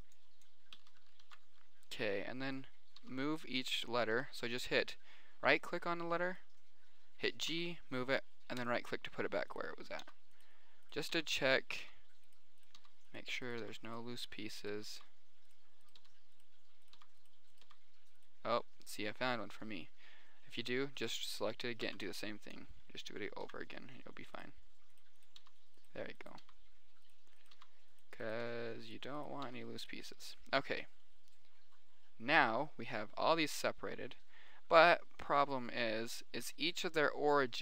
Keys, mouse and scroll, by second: 0.2 b, 1.5 ctrl+j, 3.4 g, 4.6 g, 5.9 click, 6.5 click, 7.8 g, 10.4 g, 11.5 g, 12.2 g, 13.2 g, 14.0 g, 15.2 g, 16.1 right click, 16.3 g, 17.4 g, 18.0 g, 22.2 b, 23.8 ctrl+j, 25.7 g, 26.8 g, 27.9 g, 28.9 g, 29.3 click, 29.9 g, 30.5 click, 31.7 middle click, 32.9 middle click.